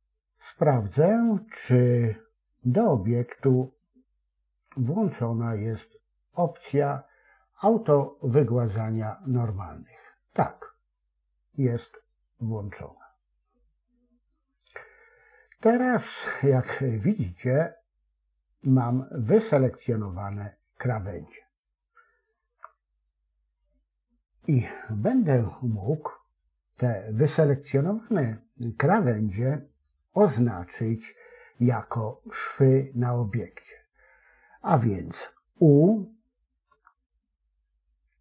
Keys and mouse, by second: 0.7 click, 3.6 click, 12.8 click, 16.0 middle click, 17.3-21.1 middle drag, 22.3 KP_7, 36.6 u.